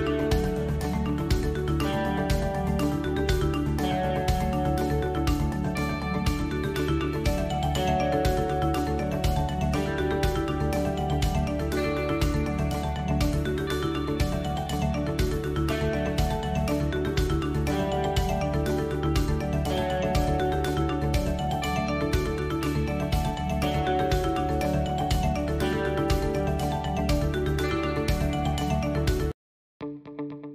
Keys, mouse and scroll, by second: 0.2 alt+h, 1.0 Tab, 1.8 click, 2.4 s, 4.8 click, 5.8-6.8 drag, 7.1 shift+z, 7.8 click, 8.6 shift+z, 9.1 KP_Decimal, 9.6 KP_7, 10.9 s, 12.2-12.8 middle drag, 13.2 s, 14.7 shift+middle drag, 15.0 KP_1, 16.4 Tab, 16.9 shift+a, 19.7 s, 22.3 shift+space, 23.5-23.9 drag, 24.3-25.0 drag, 26.2 s, 27.5 click, 28.3 KP_7, 29.4 s.